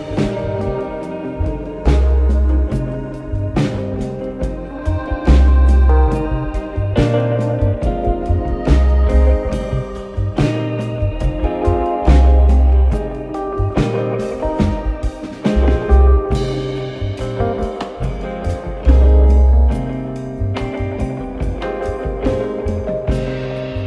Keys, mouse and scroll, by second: 0.5 ctrl+s, 1.3 ctrl+s, 4.2 scroll up 2, 4.6 s, 6.1 click, 8.6 click, 12.3 scroll down 1, 13.3 click, 13.9-14.2 drag, 15.3 click, 16.4 click, 18.3 click, 18.9 shift+a, 21.2-21.7 scroll down 1.